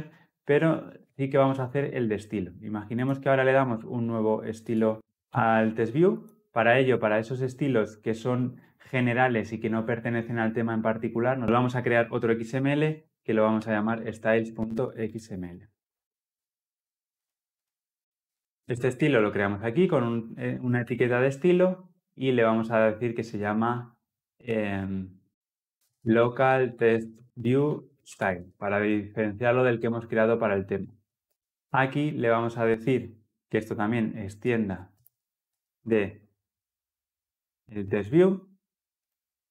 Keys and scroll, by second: 20.8 Return, 29.1 Return.